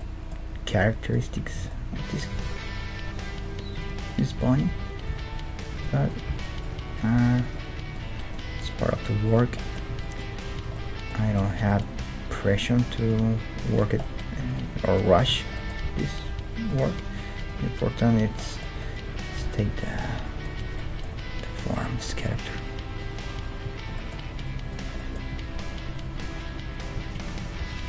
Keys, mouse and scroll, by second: 2.3 g, 2.3-3.7 middle drag, 4.1-13.3 right drag, 4.4 g, 5.1 g, 6.2 g, 7.1 g, 8.5 g, 9.6-13.3 drag, 12.0 g, 13.3 middle click, 13.7-18.4 right drag, 14.1-17.3 middle drag, 15.9 g, 17.6 g, 19.3-20.8 middle drag, 19.7 Tab, 20.6 Tab, 23.0-26.5 right drag, 25.3-26.8 middle drag, 25.3 g, 26.8-27.8 right drag, 27.6 g.